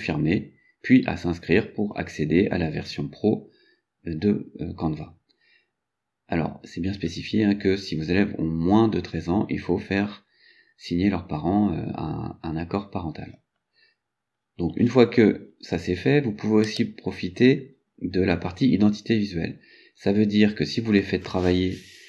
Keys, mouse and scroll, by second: 6.8 scroll up 1, 14.4 scroll up 2, 16.7 click.